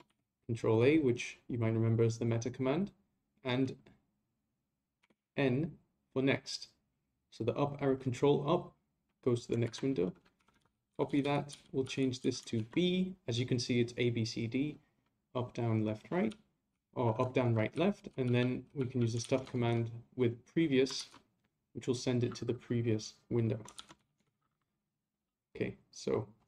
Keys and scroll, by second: 9.6 ctrl+c, 21.0 ctrl+c.